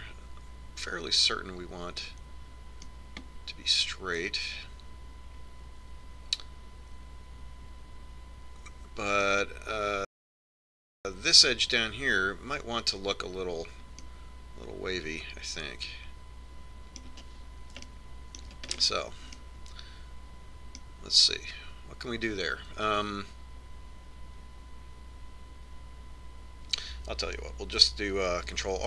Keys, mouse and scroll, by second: 4.8-6.6 middle drag, 15.0-16.7 middle drag, 18.9-22.0 middle drag.